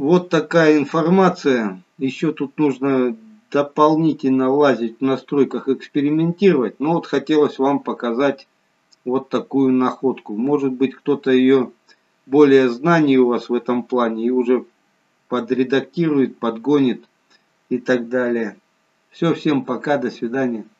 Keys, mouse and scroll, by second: 2.7-3.2 scroll down 5, 4.3-7.4 scroll down 1, 8.4-8.8 scroll up 2.